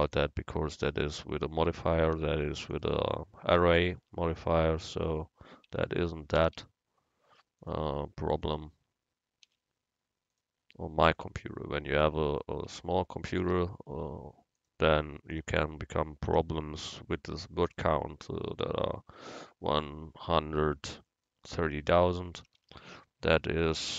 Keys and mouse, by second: 2.2 u, 4.1 Tab, 5.8 Tab, 6.5 a, 6.6 a, 7.7-9.5 drag, 9.5 u, 11.9 Tab, 12.4 click, 12.9 Tab, 13.4 a, 13.6 a, 14.7-16.4 drag, 16.4 u, 19.5 click, 19.9 Tab, 21.9 Tab, 22.5 a, 22.6 a.